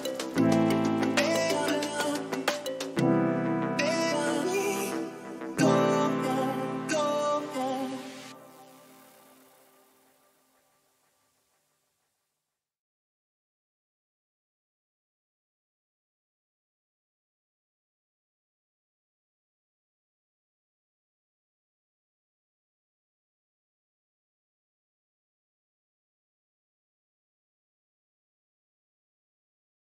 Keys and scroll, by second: 1.7 Return, 2.4 ctrl+-, 7.9 space, 15.0 ctrl+-.